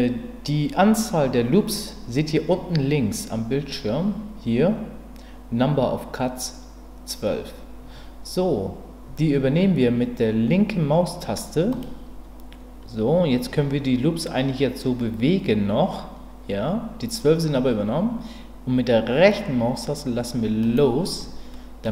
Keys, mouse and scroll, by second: 21.5 middle click.